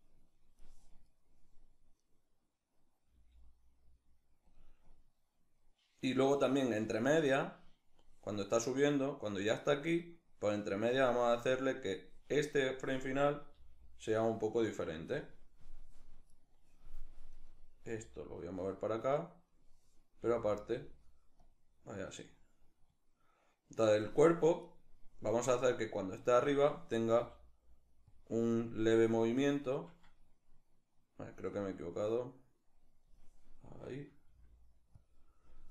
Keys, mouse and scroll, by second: 0.7 right click, 2.7 g, 4.2 click, 4.7-14.7 drag, 13.2 g, 16.0-17.5 right drag, 17.5 g, 18.2 click, 19.8-20.5 drag, 19.8 g, 21.0-24.3 drag, 24.3 right click, 25.0-27.8 drag, 26.8 r, 28.6-34.7 drag, 33.9 r.